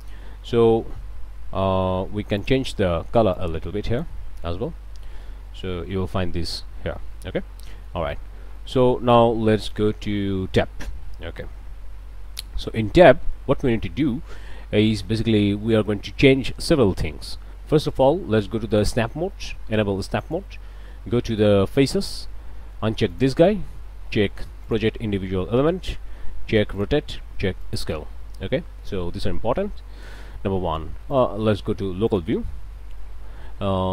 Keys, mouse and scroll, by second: 2.4 click, 3.4 click, 4.6 click, 5.8 g, 6.8 Escape, 7.1 click, 7.7 shift+click, 8.6 click, 10.5 Tab, 10.8 click, 16.6-18.2 middle drag, 18.7 click, 20.2 click, 21.7 click, 23.1 click, 24.6 click, 26.8 shift+click, 27.6 click, 31.1 click, 32.1 click.